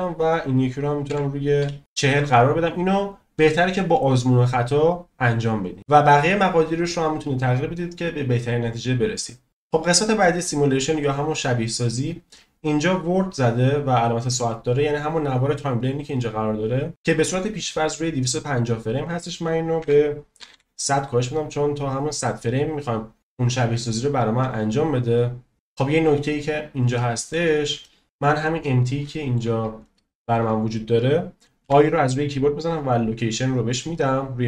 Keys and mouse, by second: 10.3 click, 18.9-21.0 drag, 20.5 0, 27.0-27.3 shift+middle drag, 27.8 shift+middle drag, 29.0-29.3 shift+middle drag, 29.8-30.2 shift+middle drag, 32.8 i.